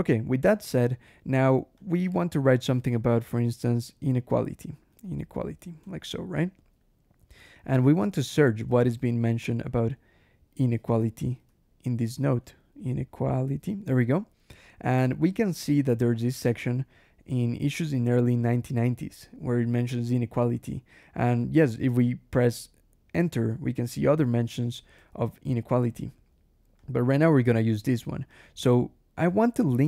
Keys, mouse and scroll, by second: 0.3 scroll down 1, 1.6 click, 2.3 o, 2.6 i, 3.9-6.8 typing, 7.7 click, 8.2 ctrl+f, 8.5-13.0 typing, 21.1 click, 21.8 click, 22.3 Return, 24.2 Return, 26.6 click, 28.2 click, 28.5 Escape, 29.2 o, 29.6 Return.